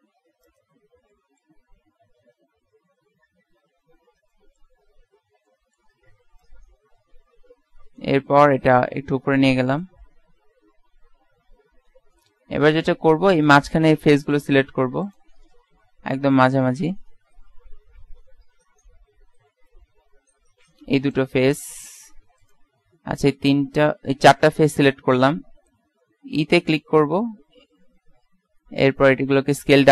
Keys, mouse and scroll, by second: 0.9-3.2 middle drag, 3.6 l, 4.0 middle click, 6.5 click, 10.4 KP_Decimal, 11.2 KP_1, 12.4-13.7 middle drag, 13.7 click, 16.1 KP_7, 17.2 z, 18.0 z, 19.6 KP_3, 21.2-22.5 drag, 25.6 typing, 26.1 middle click, 28.4 e.